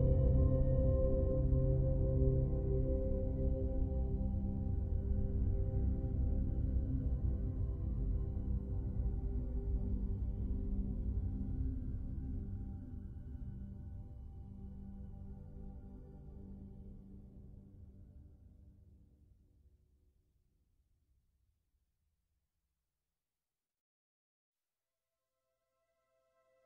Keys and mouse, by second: 0.0 alt+middle click, 0.8 middle click, 1.2 ctrl+f, 1.2 ctrl+click, 2.0 ctrl+click, 2.4 ctrl+click, 2.6 alt+middle click, 3.0 ctrl+f, 3.2 click, 3.6 3, 3.8 f, 4.0 click, 4.4 alt+middle click, 4.8 click, 5.2 alt+middle click, 5.8 2, 5.8 f, 6.0 click, 6.8 ctrl+shift+f, 7.2 ctrl+shift+f, 7.8 click, 8.2 5, 8.4-9.6 drag, 8.4 f, 9.6 alt+middle click, 9.8 click, 10.2 alt+middle click, 10.8 3, 10.8 f, 11.0 click, 11.6 alt+middle click, 12.6 click, 12.6 f, 13.0 click, 13.4 3, 13.6 5, 13.6 f, 13.8-14.9 drag, 14.9 alt+middle click, 15.3-16.3 drag, 15.5 f, 16.9 f, 17.1 click, 18.2 alt+shift+middle click, 19.0-21.0 typing, 19.2 click, 19.8 click, 20.6 click, 21.0 click, 22.0 click, 22.4 click, 22.8 click, 23.0 f, 23.2-24.4 drag, 24.8 click, 25.2 click, 26.4 click, 26.4 f.